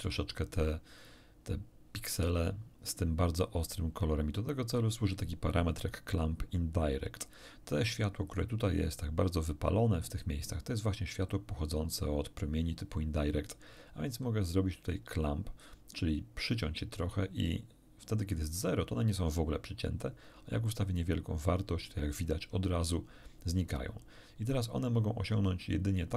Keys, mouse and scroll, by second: 20.7 click.